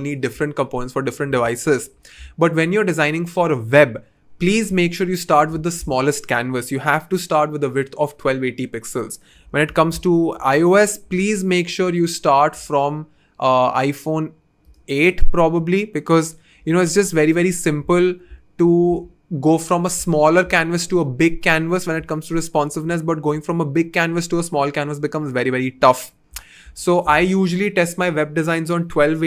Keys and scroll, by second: 9.6 f, 18.9 super+z.